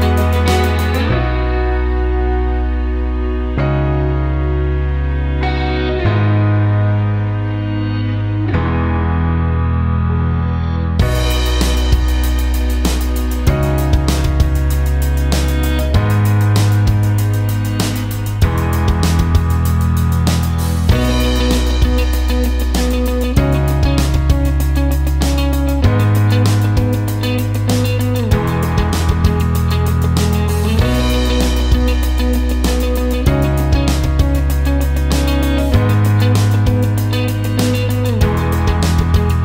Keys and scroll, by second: 6.2-9.0 typing, 9.3 ctrl+n, 9.8 ctrl+space, 11.9-12.9 typing, 15.3 7, 24.3 ctrl+space, 33.8 ctrl+space, 38.5 shift+BackSpace, 38.7 shift+d.